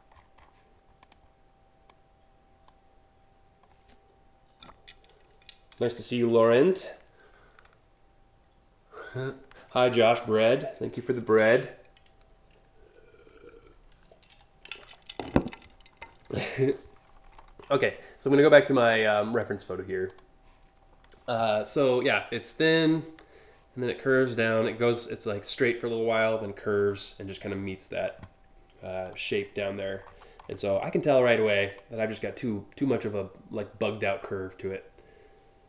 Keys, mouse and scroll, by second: 0.6 click, 1.5-2.2 drag, 17.0 scroll down 1, 17.3 scroll up 3, 18.9 click, 19.7 click, 28.7 click, 29.6-30.1 scroll down 3, 30.6 scroll down 1, 31.3 click, 32.5-35.5 drag.